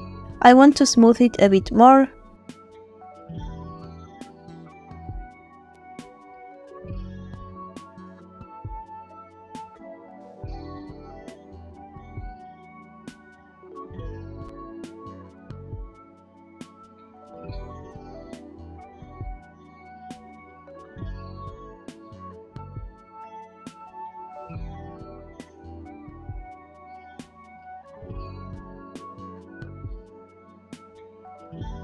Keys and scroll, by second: 4.4 space, 8.2 space, 10.8 space, 13.4 ctrl+space, 24.0 space.